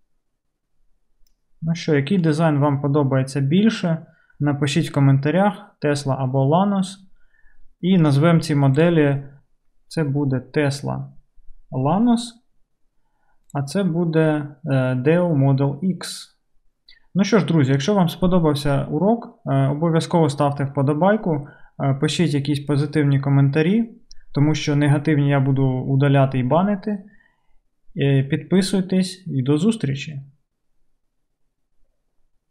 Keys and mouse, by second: 8.8 middle click, 13.4 click, 13.4 middle click.